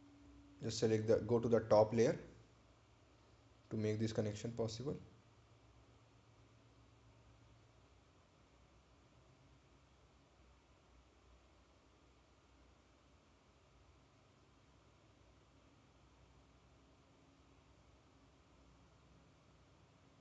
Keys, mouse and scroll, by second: 2.8 click, 6.3 click, 12.6 click, 16.6 click.